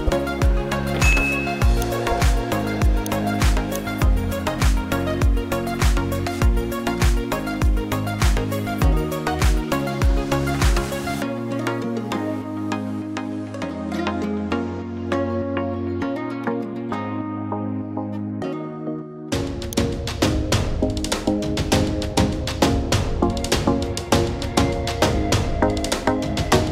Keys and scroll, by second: 13.0 ctrl+j, 17.7 ctrl+t.